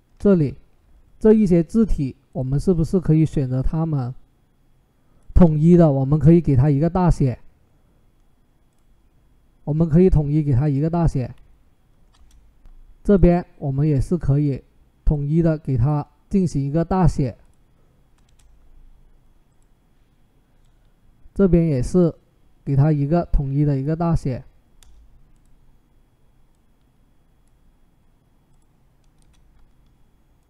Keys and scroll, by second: 11.9 Return, 18.0 Return, 24.6 Return, 29.0 Return.